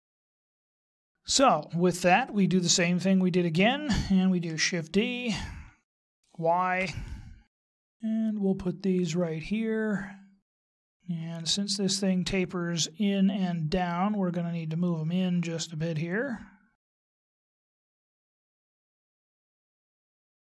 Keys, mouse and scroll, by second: 0.1 shift+middle click, 6.0 shift+d, 10.9 middle click, 16.0 click, 17.4 right click, 17.6 scroll up 5, 17.8 middle click, 18.2 right click, 18.4 click, 19.3 right click, 19.6 click, 20.0 scroll up 5, 20.2 shift+middle click.